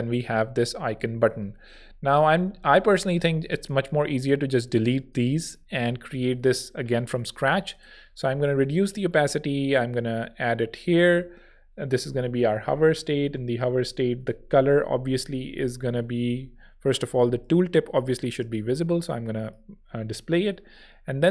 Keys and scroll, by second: 0.2 shift+Right, 0.6 shift+Down, 0.9 shift+Left, 5.7 shift+super+x, 6.6 super+x, 7.5 0, 12.0-13.1 typing, 15.9 Escape, 17.4 Home, 18.3 0.